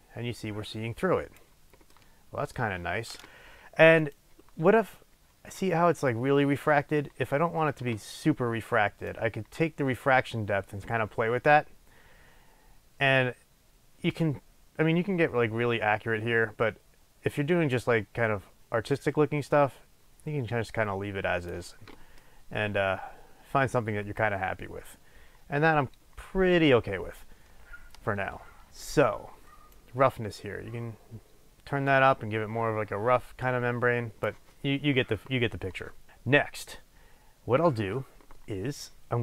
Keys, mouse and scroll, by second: 2.0-4.0 middle drag, 4.0-22.3 drag, 4.8-5.6 scroll down 2, 5.6-6.8 scroll down 1, 6.8-9.1 scroll down 1, 22.3-29.8 middle drag, 29.8-39.2 drag.